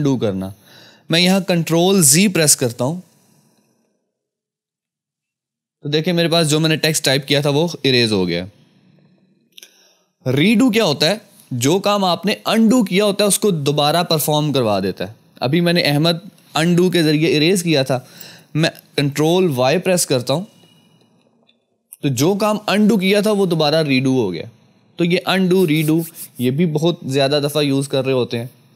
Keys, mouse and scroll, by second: 3.6 ctrl+z, 5.1 ctrl+z, 20.4 ctrl+Num_Lock, 21.0 ctrl+y.